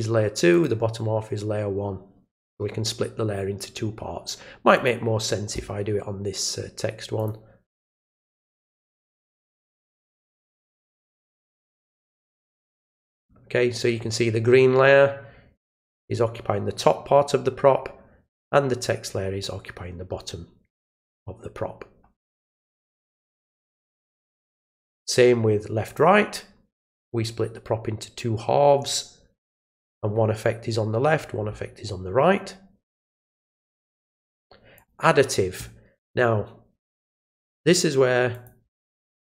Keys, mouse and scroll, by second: 0.5 click, 4.7 click, 7.1 click, 11.5 click, 24.2 click, 25.8 click, 33.0 click, 34.7 click, 38.3 click.